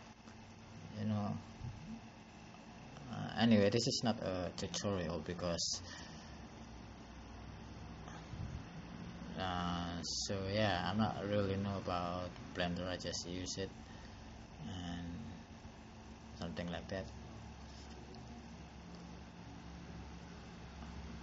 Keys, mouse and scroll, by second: 3.1 click, 10.4 click.